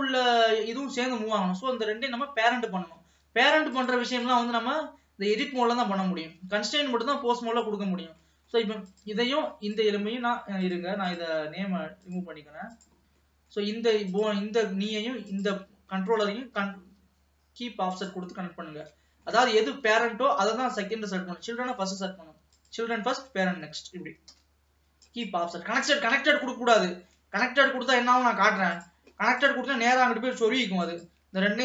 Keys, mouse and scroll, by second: 3.2 ctrl+s, 3.8 click, 4.4-6.0 drag, 6.0-6.4 scroll up 3, 6.4 ctrl+s, 6.7 middle click, 7.4 alt+a, 8.4 middle click, 8.9 click, 9.8 shift+click, 10.7 click, 11.1 click, 12.2 click, 12.9 click, 13.3 middle click, 14.2 click, 15.4 shift+click, 16.6 ctrl+p, 18.6 scroll down 1, 18.9 shift+middle click, 19.9 alt+a, 20.1-20.6 scroll up 2, 20.6 ctrl+s, 22.5 click, 23.4 shift+click, 24.4 ctrl+p, 26.3 scroll down 1, 26.5-27.5 middle drag, 27.5 ctrl+s, 27.7-28.3 scroll up 1, 28.3 middle click, 28.9 click, 29.5 click, 30.9 shift+click.